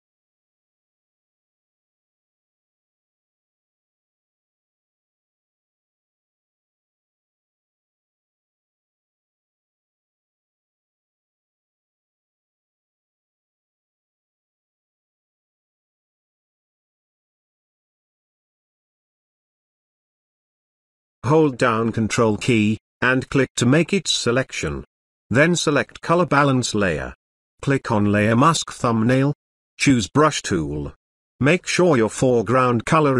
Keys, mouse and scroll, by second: 0.4-0.7 scroll up 1, 8.0 click, 12.7 click, 20.7 click, 25.9 b, 27.8 click, 29.2-30.9 typing, 31.1-33.1 drag.